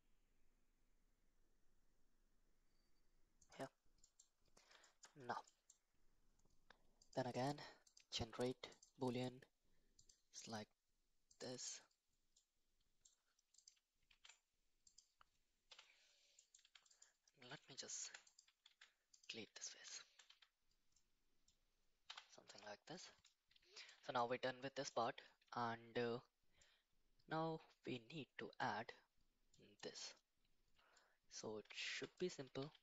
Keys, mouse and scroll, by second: 4.0 middle click, 4.8 shift+middle drag, 5.5 middle click, 7.0-8.8 drag, 9.9 click, 12.3-13.0 middle drag, 13.6 click, 14.2 ctrl+a, 14.8 click, 15.7 /, 16.4 middle drag, 16.6 Tab, 16.9 click, 18.0 3, 18.3 click, 18.7 x, 19.9 shift+middle click, 20.3 Tab, 21.0-21.5 middle drag, 22.1 /, 23.3-23.9 middle drag, 24.2-24.9 middle drag, 26.6-28.7 middle drag, 29.5 middle click, 31.0-31.4 middle drag, 31.8 shift+middle drag, 32.2 click, 32.7 shift+s.